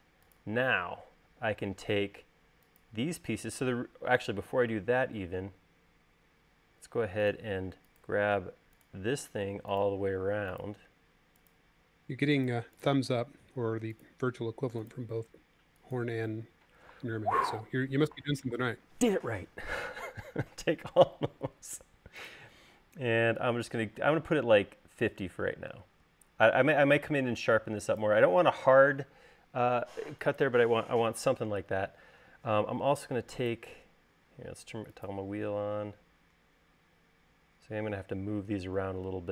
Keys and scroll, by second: 32.4 space.